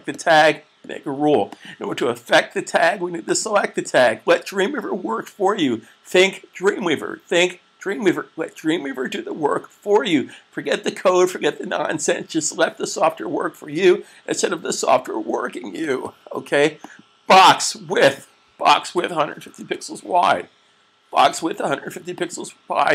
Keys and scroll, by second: 18.9-19.6 typing.